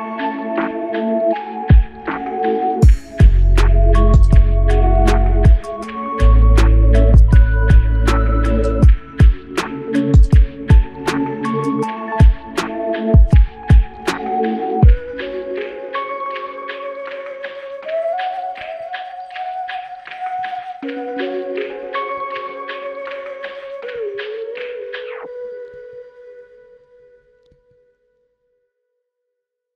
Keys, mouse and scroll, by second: 0.6 alt+click, 5.5 f, 6.2 alt+shift+click, 22.8 alt+click, 26.1 alt+shift+click, 26.8 alt+shift+click, 27.6 alt+click, 28.1 alt+shift+click, 28.9 alt+click.